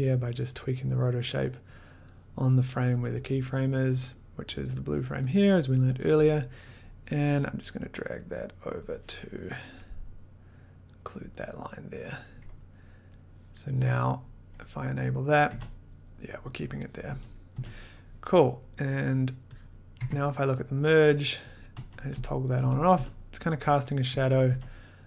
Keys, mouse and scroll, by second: 0.1 click, 0.2 click, 1.7 click, 3.6 click, 5.5 middle click, 6.3 click, 6.3 middle click, 6.7 click, 6.8 middle click, 8.7 click, 11.1 click, 12.7 click, 13.2 click, 13.7 middle click, 14.7 click, 15.5 d, 17.1-17.5 typing, 18.4 middle click, 18.9 middle click, 19.7 click, 20.2-22.9 typing, 20.7 scroll, 21.6 click, 24.1 d, 24.4 d.